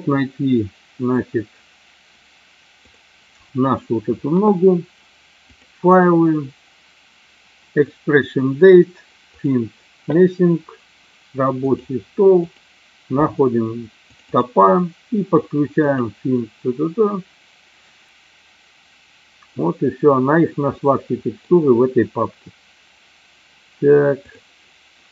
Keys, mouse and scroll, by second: 5.6-9.7 drag, 20.7-21.5 middle drag, 24.4 click.